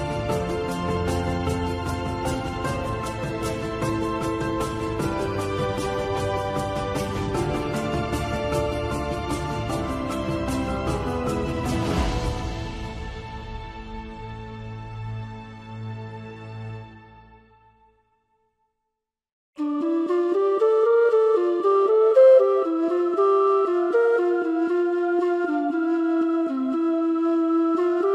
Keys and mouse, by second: 1.5 click, 6.0 ctrl+1, 7.3 shift+middle click, 10.9 shift+d, 14.0 Tab, 17.0 3, 18.6-20.4 drag, 20.8-21.8 middle drag, 22.0-23.4 middle drag, 24.7 shift+click, 27.0 x.